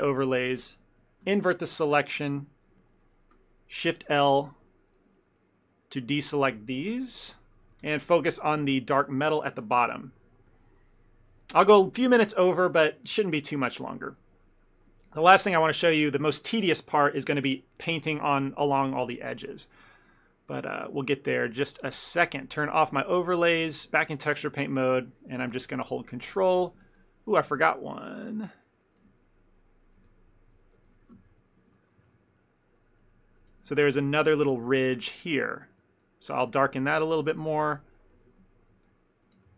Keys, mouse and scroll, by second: 1.3 ctrl+i, 2.0 ctrl+middle click, 2.3 shift+middle click, 2.8 shift+middle click, 4.1 shift+l, 4.6 shift+l, 5.2 ctrl+middle click, 5.6 middle click, 7.2 shift+l, 7.5 middle click, 7.7 middle click, 7.8 ctrl+middle click, 8.2 Tab, 8.6 shift+middle click, 8.7 shift+middle click, 8.8 ctrl+middle click, 10.0 KP_Divide, 15.0 ctrl+middle click, 15.3 shift+middle click, 20.0 ctrl+middle click, 20.2 shift+middle click, 20.5 middle click, 20.8 ctrl+middle click, 21.1 shift+middle click, 21.4 ctrl+middle click, 22.7 click, 23.3 shift+middle click, 23.6 ctrl+middle click, 24.0 middle click, 24.3 f, 24.6 ctrl+middle click, 25.2 ctrl+click, 25.6 ctrl+click, 25.9 ctrl+click, 26.0 middle click, 26.3 shift+middle click, 26.5 ctrl+middle click, 26.9 ctrl+click, 27.1 ctrl+click, 27.4 f, 27.7 ctrl+middle click, 27.9 middle click, 29.0 f, 29.2 ctrl+middle click, 29.6 middle click, 30.1 f, 31.2 KP_1, 31.9 ctrl+middle click, 32.1 shift+middle click, 32.3 ctrl+middle click, 32.9 ctrl+click, 33.4 ctrl+click, 33.5 f, 33.8 ctrl+click, 34.1 ctrl+click, 34.4 f, 34.7 ctrl+click, 35.2 ctrl+click, 35.7 ctrl+click, 35.9 ctrl+click, 36.1 ctrl+click, 36.5 ctrl+middle click, 36.8 middle click, 38.2 shift+middle click, 38.4 ctrl+middle click, 38.8 f, 39.4 f.